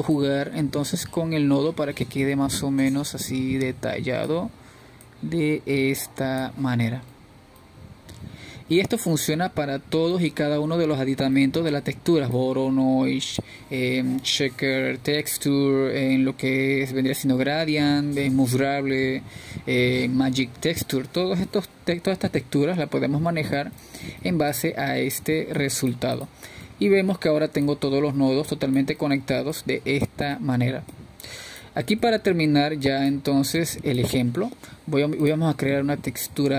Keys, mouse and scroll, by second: 1.5-1.8 scroll up 2, 1.8-3.7 middle drag, 3.7-6.5 drag, 8.6 click, 10.1 scroll down 3, 10.4-11.3 middle drag, 11.3-12.1 scroll down 2, 12.1 scroll down 1, 12.1-15.7 middle drag, 15.7-36.2 drag.